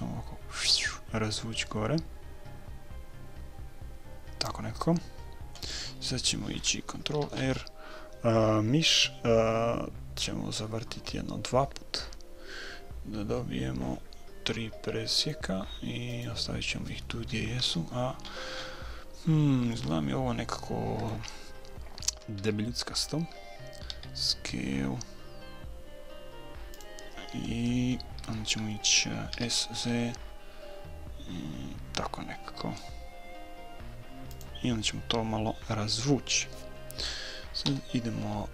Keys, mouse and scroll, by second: 7.2 ctrl+r, 17.6 a, 18.2-21.5 middle drag, 18.2-19.9 scroll up 1, 22.4 a, 24.0 s, 29.3 s, 37.7 a.